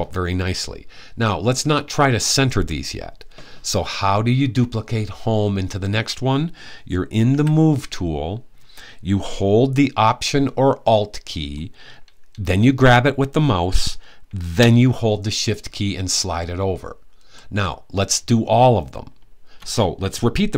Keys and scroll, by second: 7.0 v.